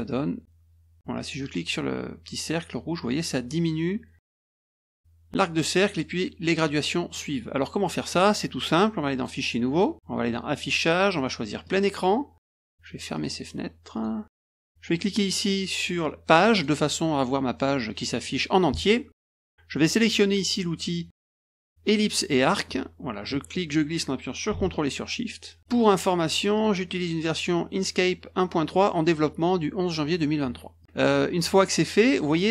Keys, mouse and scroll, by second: 1.4-4.5 drag, 7.1 click, 9.1 click, 9.7 click, 10.5 click, 11.6 click, 13.1 click, 13.9 click, 16.5 click, 22.4 click, 23.5-25.6 drag, 25.7 click, 26.5 click, 30.8 click.